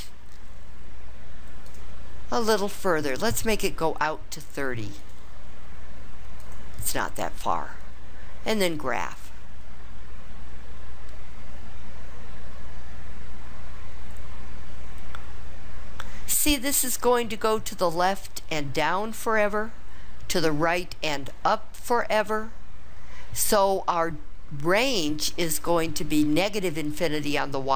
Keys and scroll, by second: 1.7 Down, 5.0 3, 6.5 0.